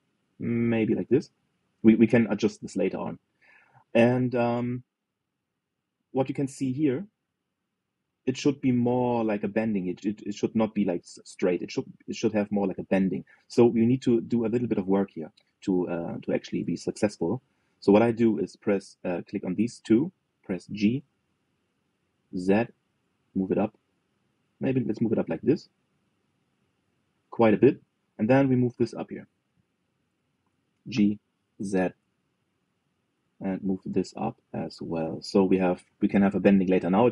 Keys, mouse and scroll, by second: 2.0-6.4 middle drag, 6.4-6.8 scroll up 3, 6.8-10.8 middle drag, 13.5-14.9 middle drag, 14.9 click, 15.7-16.1 scroll up 2, 16.9 click, 17.5 shift+click, 18.0-21.4 middle drag, 21.4 g, 27.9 middle click, 28.9 click, 29.3 shift+click, 30.5 click, 30.9 shift+click, 31.6 g, 35.6-36.8 middle drag, 36.8 KP_3.